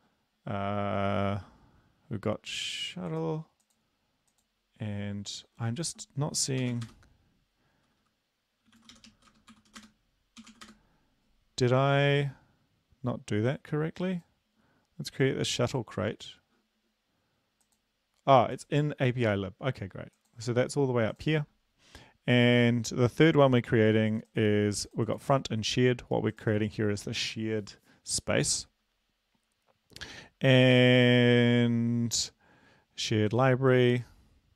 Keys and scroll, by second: 6.6 typing, 8.7-10.9 typing.